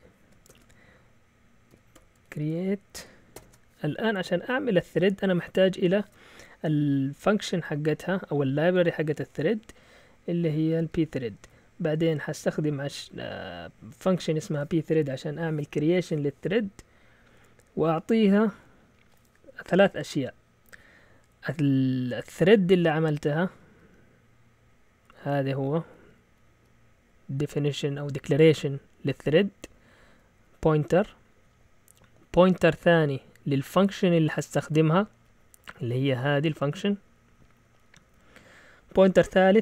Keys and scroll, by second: 0.0-3.3 typing, 9.6 Up, 10.2-13.5 typing, 23.3-23.8 typing, 25.2-28.4 typing, 29.7-30.0 typing, 35.2 Down, 35.4-38.0 typing.